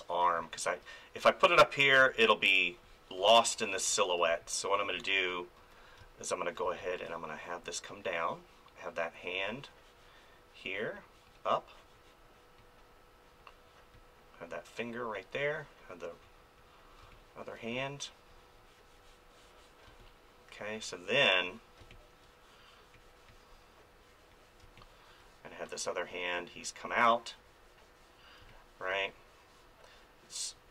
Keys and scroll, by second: 0.2 space, 2.0 space, 3.8 ctrl+z, 4.2 space, 5.6 ctrl+z, 6.0 space, 17.0 space, 19.8 space, 21.8 space, 24.6 space, 28.4 space.